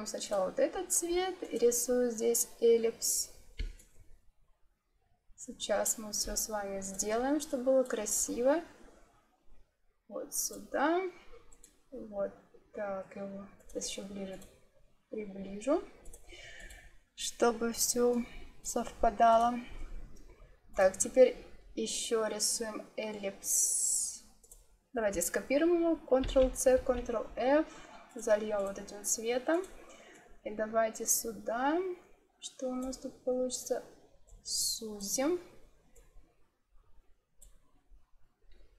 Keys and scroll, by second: 26.1 ctrl+c, 27.3 ctrl+f.